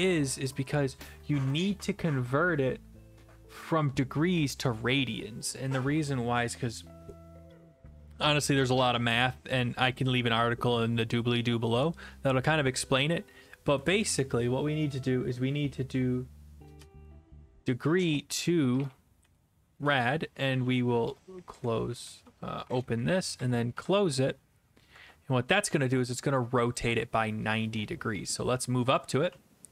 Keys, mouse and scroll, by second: 13.7 Left, 13.8 Left, 14.0 Left, 16.5-20.1 typing, 21.8 Right, 21.8-23.8 typing, 21.9 Left, 22.0 Left, 22.8 Right, 22.9 Right, 25.0 ctrl+s, 26.8 click, 28.8-29.7 typing.